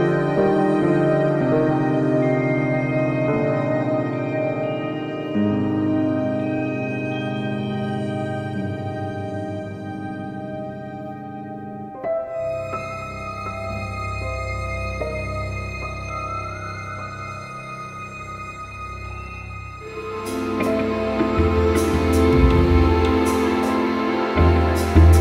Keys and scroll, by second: 1.3 Delete.